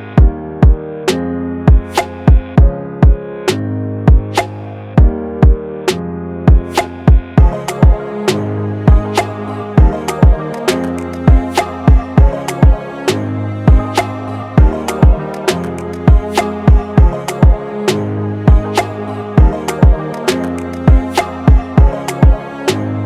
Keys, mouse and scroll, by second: 2.2 scroll down 1, 5.9-6.8 typing, 7.9-11.0 typing, 16.3-17.0 typing, 17.0 ctrl+-.